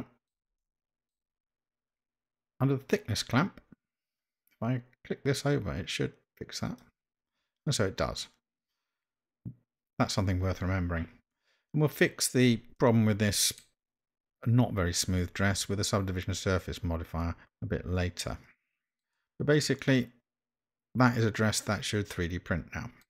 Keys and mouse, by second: 0.6-1.1 shift+middle drag, 5.3-6.9 drag, 8.2-9.7 middle drag, 11.3-11.9 middle drag, 12.8-13.6 middle drag, 18.2-19.0 middle drag, 19.1-23.0 middle drag.